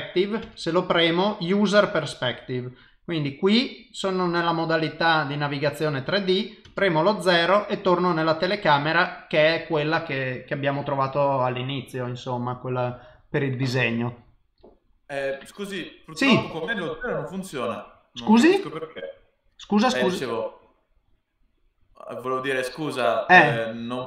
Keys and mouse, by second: 0.4 KP_0, 3.0 middle click, 6.6 KP_0, 8.3 click, 8.9 click.